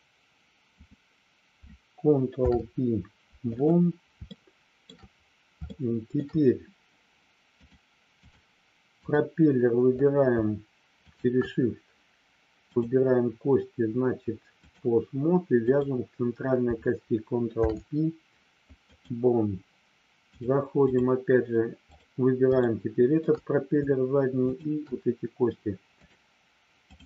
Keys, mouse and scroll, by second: 2.3 ctrl+p, 4.3 shift+middle click, 5.7 shift+middle click, 7.6 click, 9.0 click, 12.6-14.8 drag, 15.6 click, 17.4 ctrl+p, 20.2 click, 21.8 click, 22.6 shift+middle click, 24.4 shift+click, 26.0-27.0 drag.